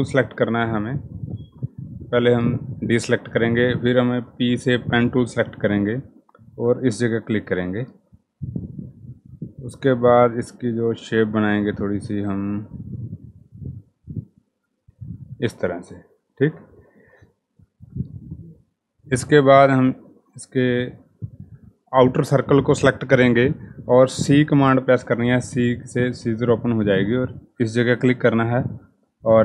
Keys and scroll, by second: 3.8 p, 24.2 c.